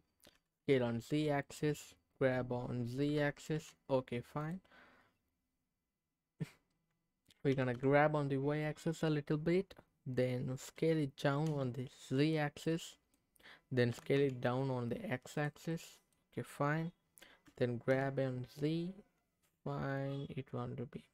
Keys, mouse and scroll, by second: 0.3 s, 0.6 z, 1.4-2.4 drag, 3.0 g, 3.5 z, 4.4 click, 4.8-6.2 scroll up 1, 7.5 g, 7.7 y, 8.9 click, 10.8 s, 11.5 z, 12.2 click, 12.6 middle click, 13.2-13.8 scroll down 2, 13.9 s, 14.1 x, 15.3 click, 15.7 middle click, 17.5 g, 17.9 z.